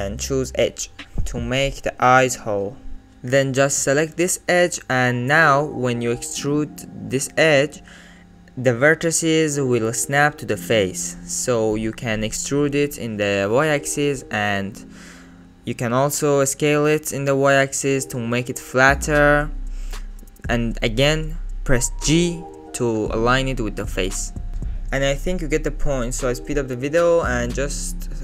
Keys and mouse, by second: 1.8 alt+z, 4.7 alt+shift+click, 5.4 middle click, 6.4 alt+middle click, 6.7 alt+z, 7.6 e, 8.9-10.6 middle drag, 10.9 middle click, 11.3 alt+z, 11.8 click, 12.9 alt+click, 13.1 alt+click, 13.6 s, 18.2 middle click, 19.9 alt+z, 20.6 g, 21.5-22.8 drag, 24.6 alt+middle click, 25.0 alt+middle click, 27.8 e.